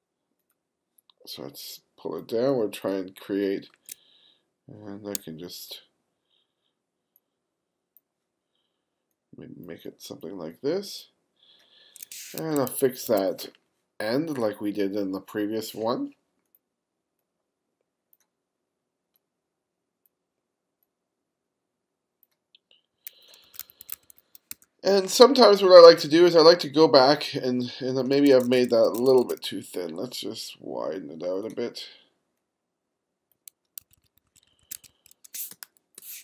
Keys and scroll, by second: 5.2 q, 12.4 2, 23.5 1, 28.2 2, 33.8 1, 35.5 space.